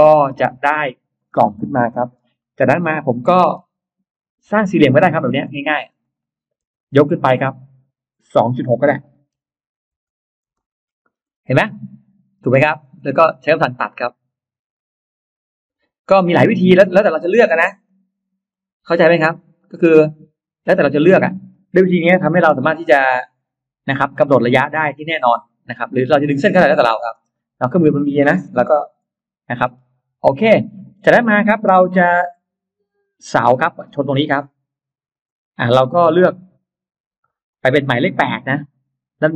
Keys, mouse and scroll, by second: 0.1 click, 0.3 click, 0.5 click, 1.0-2.2 scroll down 3, 1.6 Delete, 2.2 middle click, 2.8-3.7 scroll up 2, 3.6 r, 4.0 click, 5.0 click, 5.2 space, 5.4 click, 5.8 click, 6.6 click, 6.6 m, 8.6 2, 9.2 6, 10.0 Return, 10.4 space, 10.8-11.2 scroll down 1, 11.4 middle click, 12.4 scroll down 1, 12.8 scroll up 1, 15.6 click, 17.7 click, 18.3 click, 19.1-20.5 middle drag, 20.8 middle click, 20.8 space, 21.0 click, 21.0 scroll up 1, 22.2 s, 22.6 click, 23.7 click, 24.4 click, 25.8 click, 26.6 click, 27.0 space, 27.3 click, 27.7 click, 27.8 space, 28.6 Delete, 29.0 middle click, 30.1-30.8 scroll up 1, 30.9 middle click, 32.0 shift+x, 32.8-34.8 drag, 35.0 right click, 37.3 click.